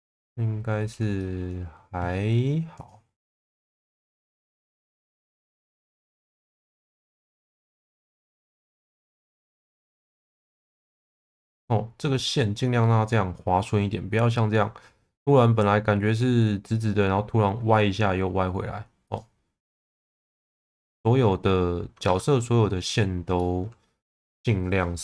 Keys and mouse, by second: 1.2 shift+middle click, 2.8 click, 3.5 click, 5.1 click, 5.9 click, 7.0 click, 10.0 click, 19.7 click, 19.9 click, 22.0 Tab, 22.4 middle click, 23.4 middle click.